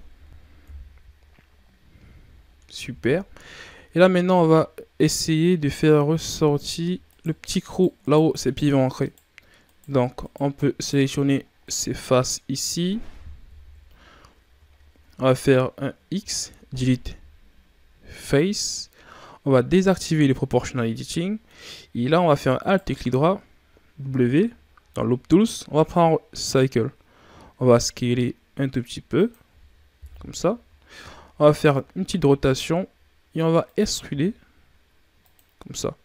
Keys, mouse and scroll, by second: 0.5 KP_3, 2.3-3.1 ctrl+scroll up 7, 3.1 scroll up 2, 3.5 Tab, 4.1 ctrl+scroll down 1, 4.2-5.5 middle drag, 5.5 scroll up 2, 6.1 right click, 7.0 shift+right click, 7.6 shift+right click, 7.9 shift+right click, 8.3 shift+right click, 8.9 shift+right click, 9.6 shift+right click, 10.1 shift+right click, 10.6 shift+right click, 11.4 scroll down 1, 11.6-13.5 middle drag, 13.5 KP_3, 14.6-15.0 shift+scroll up 1, 16.1 x, 19.8 click, 20.3 o, 20.5-22.5 middle drag, 22.5 alt+right click, 23.9 w, 27.3 s, 29.9 KP_3, 31.2-31.7 scroll up 3, 31.9 r, 34.0 e.